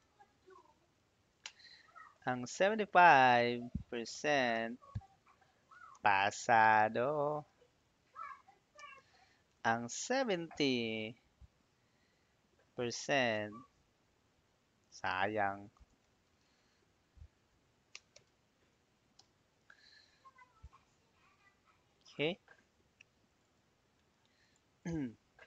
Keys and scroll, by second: 0.0-1.0 typing, 1.3 Return, 2.9 7, 3.8 5, 4.8 Tab, 5.6-8.4 typing, 8.6 Return, 9.7-10.6 typing, 12.9 shift+5, 13.2 Tab, 15.4-16.7 typing, 17.7-18.8 typing, 19.0 Return.